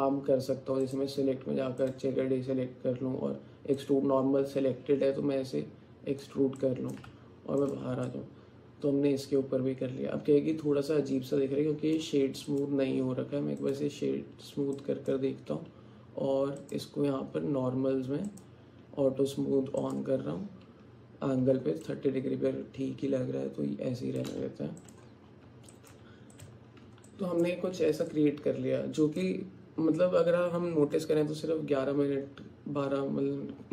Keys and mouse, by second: 0.9-2.0 drag, 3.8-6.3 drag, 6.6 alt+click, 7.1 Tab, 8.1-12.0 alt+drag, 14.7 alt+click, 16.7 click, 18.4 click, 19.8 click, 21.9-24.2 alt+drag, 24.4 Tab, 25.7 click, 26.5 Tab, 27.1 alt+click, 28.1-29.2 alt+drag.